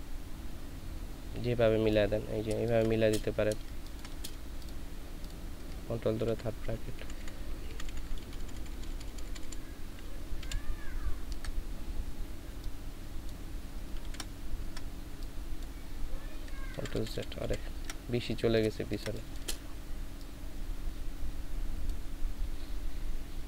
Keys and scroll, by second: 2.5 ctrl+space, 3.5 ctrl+space, 6.2 ctrl+], 7.1 ctrl+], 7.8-9.5 typing, 10.4 ctrl+], 14.0 ctrl+z, 16.7 ctrl+z, 17.4 ctrl+z, 18.8 ctrl+space.